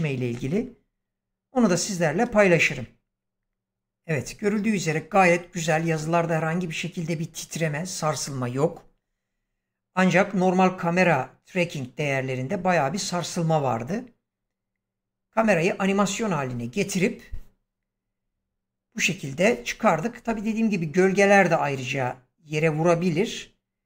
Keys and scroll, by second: 2.1 space.